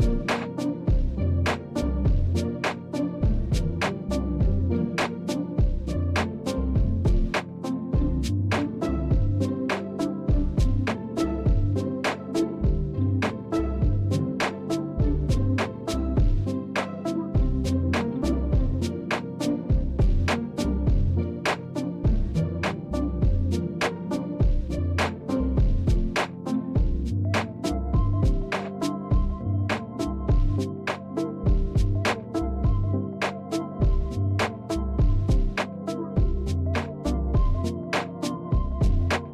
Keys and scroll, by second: 28.4 alt+Tab, 31.4-32.7 typing, 34.2-39.3 typing.